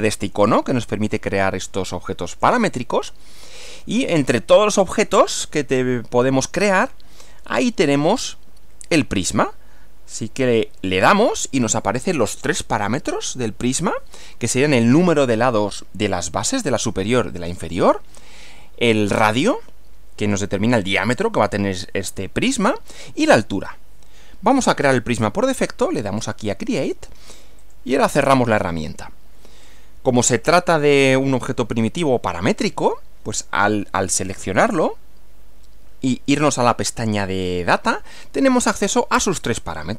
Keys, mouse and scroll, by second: 2.3 click, 3.7 click, 11.0 click, 26.1 click, 27.7 click, 29.5 middle click, 29.6 scroll down 1, 31.0-32.1 middle drag, 32.3-32.8 middle drag, 34.3 click, 36.7 click.